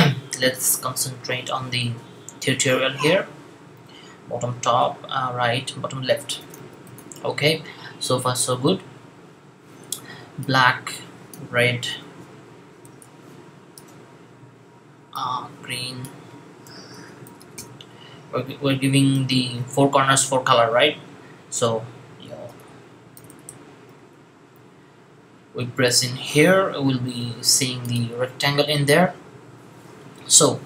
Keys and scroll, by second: 5.9-6.9 typing, 12.4-13.6 typing, 16.2-17.4 typing, 22.1-23.8 typing.